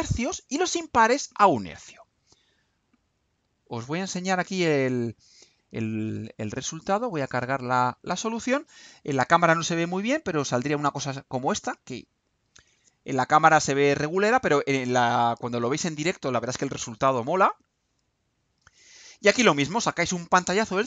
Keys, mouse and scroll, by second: 2.9 click, 3.8 click, 5.7 click, 5.9 scroll up 1, 7.6 click.